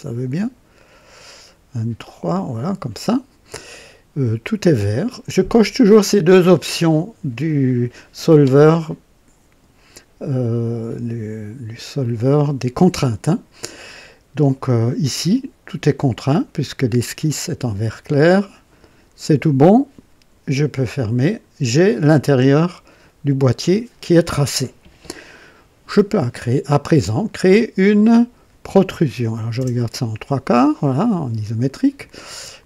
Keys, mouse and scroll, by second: 0.3-2.7 drag, 21.2 click, 29.5 KP_0.